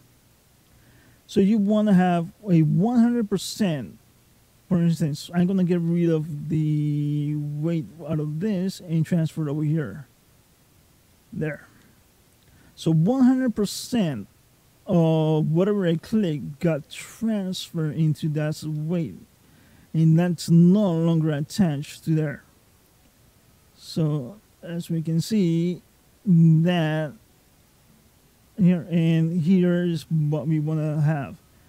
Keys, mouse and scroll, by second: 6.6 middle click, 10.1 click, 10.9 middle click, 14.5 middle click, 18.6 middle click, 19.7 middle click, 21.3 middle click, 22.6 click, 25.5 middle click, 27.4 middle click.